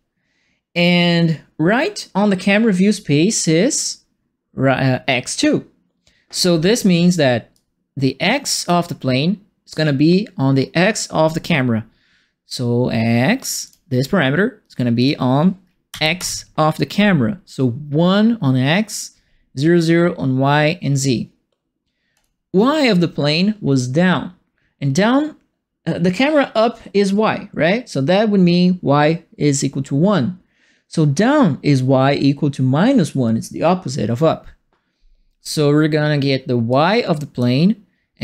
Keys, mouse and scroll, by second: 7.5-8.6 drag, 13.6 click, 14.9 click, 15.9 KP_1, 16.1 KP_Enter, 22.1 click, 36.7 click.